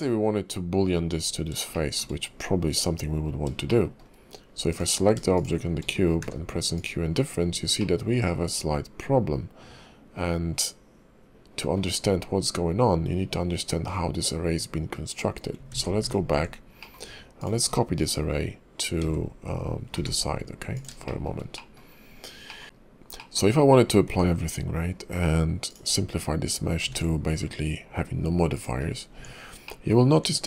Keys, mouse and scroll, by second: 1.7 shift+middle click, 3.1 scroll up 2, 3.7 shift+middle click, 4.7 click, 5.3 shift+click, 5.9-6.2 scroll down 2, 6.2 q, 7.4-8.0 scroll up 4, 7.8 middle click, 12.0-13.4 scroll down 3, 13.4-14.4 scroll up 2, 14.4-15.6 scroll down 1, 15.6 scroll down 1, 15.7 ctrl+z, 16.1 ctrl+z, 16.8 middle click, 17.3 click, 17.6-18.2 scroll down 1, 18.2-18.8 scroll down 2, 19.0 shift+d, 21.0 shift+middle click, 21.9-22.4 scroll down 1, 22.4 middle click, 23.2 middle click, 24.1 q, 26.9 ctrl+`, 28.8 scroll up 3, 29.1 Tab, 29.6 middle click, 30.0 scroll up 2.